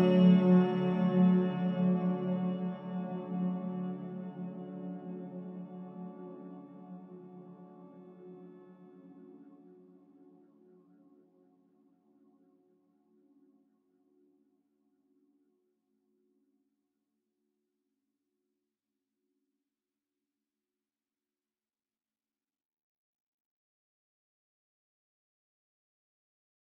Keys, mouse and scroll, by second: 1.6 middle click, 1.7 click, 8.7-15.1 drag, 22.8-26.2 drag, 26.2 scroll down 1.